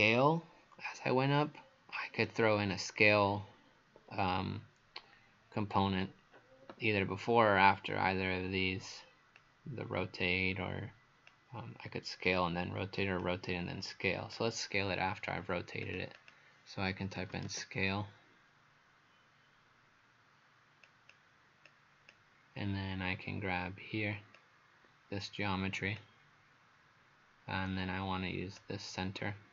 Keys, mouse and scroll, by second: 0.9 right click, 9.4 click, 16.2 click, 16.9-18.0 typing, 20.9 click.